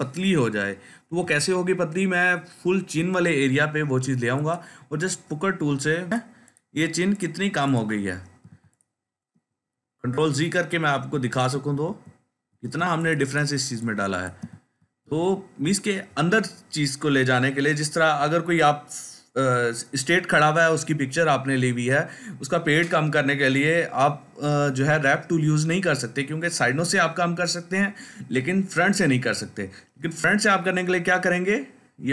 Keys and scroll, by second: 9.9 ctrl+z, 10.6 ctrl+z.